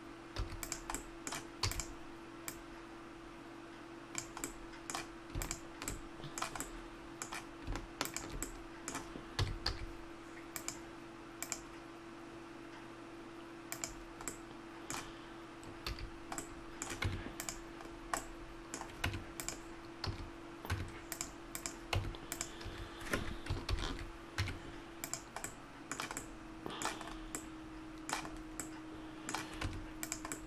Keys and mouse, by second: 0.4 a, 0.6-4.3 drag, 1.6 e, 4.5 middle click, 5.4-6.6 right drag, 6.6 middle click, 8.0-9.3 middle drag, 9.3 s, 14.3-15.9 middle drag, 15.9 a, 17.0 Tab, 17.4-18.5 right drag, 19.0 Tab, 20.1 a, 20.7 Tab, 21.9 Tab, 22.6 a, 23.6 ctrl+n, 24.4 Tab, 29.6 Tab.